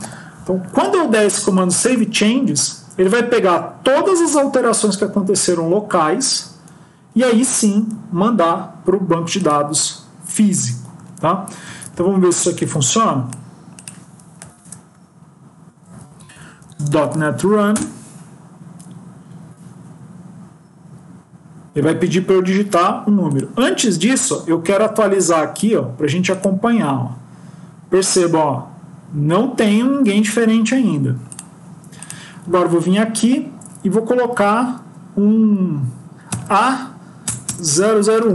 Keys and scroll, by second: 11.7 ctrl+s.